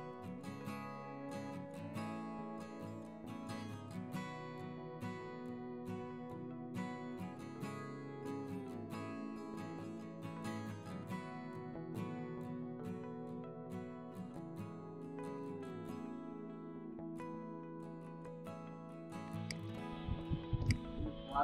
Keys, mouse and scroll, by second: 3.4 v, 4.2 double click, 7.1 double click, 7.4 Delete, 10.0 v, 10.1 double click, 10.6 Delete, 11.0 ctrl+z, 11.2 double click, 11.4 Delete, 14.2 double click, 15.5 ctrl+z, 16.9 ctrl+alt+click, 17.0 ctrl+alt+double click, 17.1 ctrl+click, 17.3 space, 18.4 double click, 18.6 ctrl+space, 18.8 ctrl+alt+click, 19.2 ctrl+space.